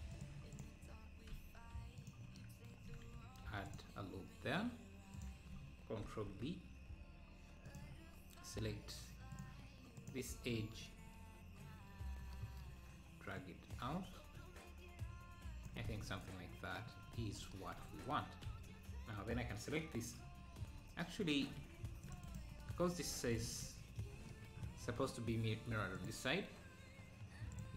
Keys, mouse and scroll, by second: 0.1-1.3 drag, 1.3 e, 3.2 ctrl+r, 9.4-12.4 drag, 13.4-15.9 drag, 15.9 Tab, 17.5 Tab, 17.8 Tab, 20.6 scroll down 1, 21.9 ctrl+r, 22.6 ctrl+r, 23.1 ctrl+r, 27.6-27.7 drag.